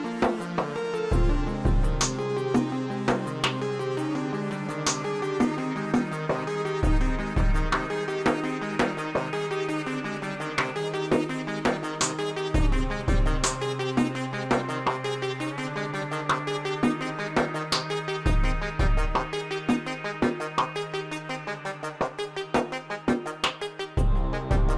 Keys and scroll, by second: 5.6 g, 6.2 x, 15.7 g, 16.1 z, 19.2 g, 19.5 z.